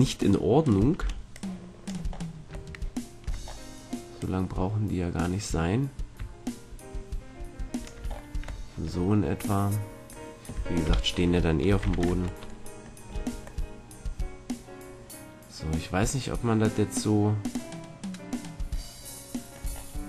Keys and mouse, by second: 0.9 b, 2.0-6.0 drag, 8.0 middle click, 10.8 KP_1, 11.8 z, 12.0 Tab, 19.7-20.0 middle drag.